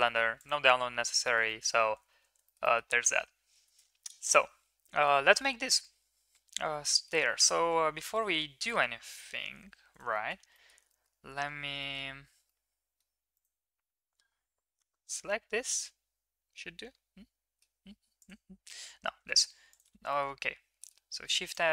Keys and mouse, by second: 0.0 middle click, 1.2 shift+middle drag, 1.4 middle click, 2.1 ctrl+s, 2.4 middle click, 2.6 middle click, 3.6 shift+a, 6.9 middle drag, 7.6 Tab, 8.0 middle click, 8.6 shift+middle drag, 9.5 1, 10.1 shift+middle drag, 10.5 middle click, 10.9 middle drag, 11.8 middle drag, 12.4-13.0 middle drag, 13.3 click, 15.7-17.6 middle drag, 19.1 shift+s, 20.1 Tab, 20.1 middle click, 20.7 middle click.